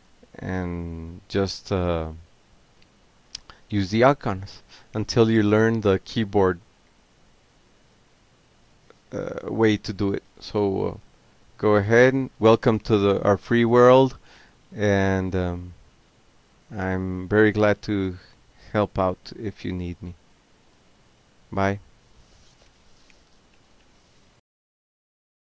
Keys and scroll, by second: 0.0-0.5 typing, 0.8 Return, 1.7 m, 1.8 Tab, 3.1 Return, 3.9 Tab, 4.8 l, 5.0 Tab, 5.4 Tab, 7.6-8.9 typing, 9.4 Return, 10.2 a, 10.6 Tab, 11.4 c, 11.5 Tab, 13.3 alt+q, 14.3 shift+c, 16.3 BackSpace, 17.2 ctrl+c, 17.6 ctrl+p, 19.1-22.8 typing, 23.8 Return.